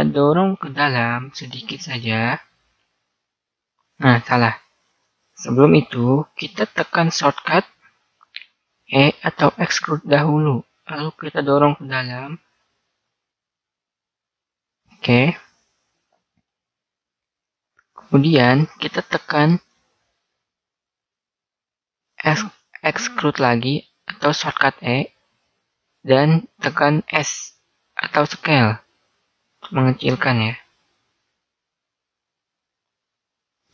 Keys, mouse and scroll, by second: 2.5 click, 5.8 ctrl+z, 8.5 middle click, 9.9 e, 16.3-17.5 middle drag, 25.4 e.